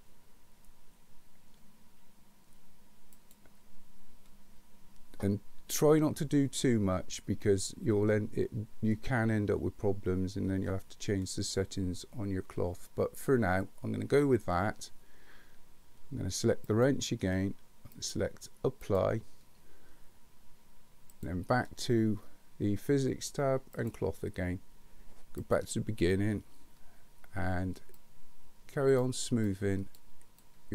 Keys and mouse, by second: 3.2 click, 16.6 click, 17.9-19.0 drag, 23.8 click, 25.5 click, 28.0-29.0 drag, 29.4 click, 30.4 click.